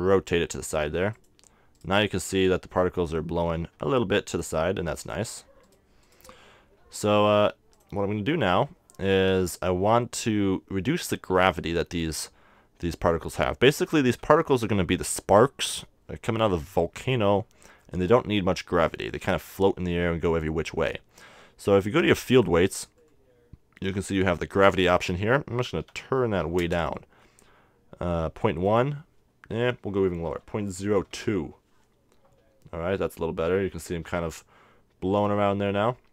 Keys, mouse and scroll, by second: 1.3-3.2 drag, 1.8-4.0 right drag, 4.5-7.9 right drag, 4.7 r, 5.1-7.0 drag, 7.9-9.5 drag, 9.5-11.3 middle drag, 17.8 middle click, 18.3-20.1 middle drag, 22.4-24.2 drag, 25.1-26.8 drag, 28.6-30.3 drag.